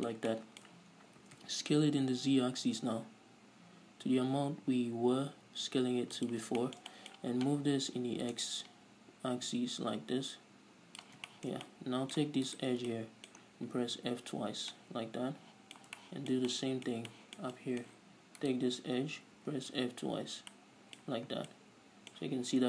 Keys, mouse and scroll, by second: 0.1-6.7 middle drag, 1.5 s, 6.7 shift+click, 7.1-8.7 shift+middle drag, 8.7-11.7 drag, 11.7-12.9 shift+middle drag, 12.9 right click, 13.4-15.6 middle drag, 14.4 f, 15.8-18.9 middle drag, 18.9-20.1 right drag, 20.1 f, 21.0-22.6 middle drag, 21.7 Tab, 21.8 scroll down 2.